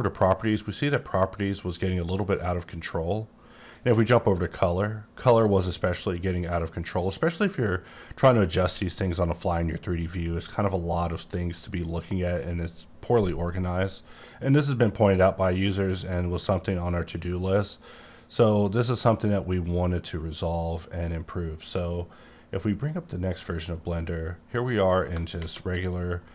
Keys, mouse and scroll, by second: 3.7 click, 5.0-5.6 scroll down 10, 5.6 scroll up 7, 11.2-12.0 scroll down 1, 12.0-13.8 scroll up 1, 15.8 click, 17.6 click, 23.4 click, 24.5 middle click.